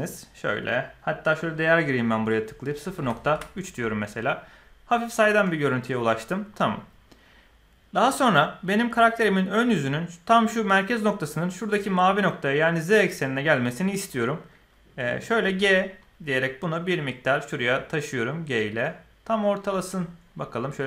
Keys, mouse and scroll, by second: 1.3-3.8 drag, 15.4 g.